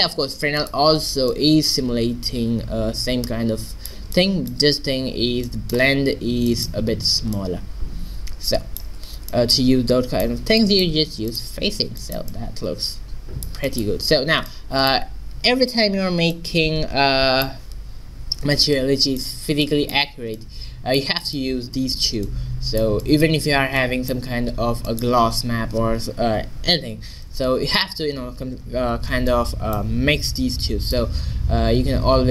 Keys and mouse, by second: 0.6 click, 1.4 middle click, 2.7 middle click, 4.2 middle click, 11.3-13.1 drag, 16.4-18.1 drag, 18.8-20.6 middle drag, 32.0 shift+a.